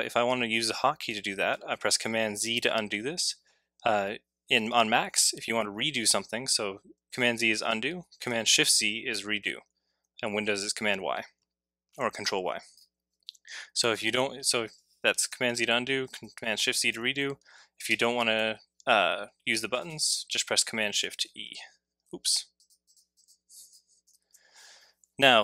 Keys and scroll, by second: 2.4 super+z, 8.5 shift+z, 15.3 super+z, 16.6 shift+super+z, 24.0 e.